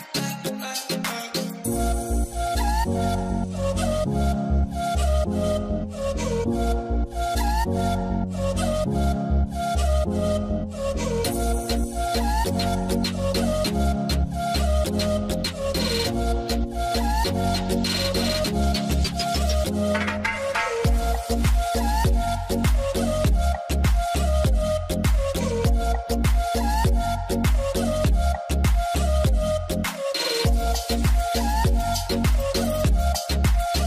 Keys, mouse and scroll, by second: 7.8 Return, 8.2-9.4 scroll down 1, 9.7 scroll down 1, 9.8 scroll up 1, 14.9 2, 15.0 Return, 15.1 2, 18.0 Return, 18.0 2, 24.3 alt+w, 25.1 alt+middle click, 26.0 shift+c, 29.1 shift+c, 29.3 scroll up 1, 29.6 scroll down 2, 31.2 scroll up 1, 31.4 middle click, 31.8 scroll down 1, 31.9 alt+middle click, 33.3 alt+middle click, 33.3 scroll up 1.